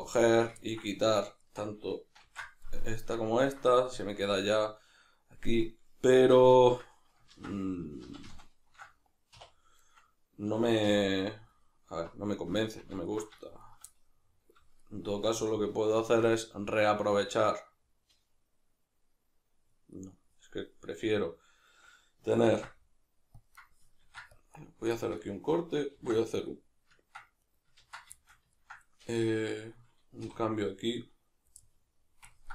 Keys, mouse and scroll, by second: 1.4 shift+right drag, 2.2 ctrl+x, 2.7-9.8 middle drag, 6.6 ctrl+z, 8.0 ctrl+shift+z, 9.3 2, 9.8 right click, 10.8 3, 11.5 alt+right click, 12.9 alt+shift+right drag, 13.4 shift+right drag, 13.6 shift+right drag, 13.9-14.8 middle drag, 14.8 shift+right click, 15.1 shift+right drag, 15.4-23.7 middle drag, 22.5 ctrl+r, 23.7 right click, 24.0 ctrl+r, 24.7 right click, 25.0-27.6 shift+middle drag, 26.0 ctrl+r, 27.6 right click, 27.8 ctrl+z, 28.2-31.0 shift+middle drag, 30.2 3, 31.0 right click, 31.6-32.5 middle drag.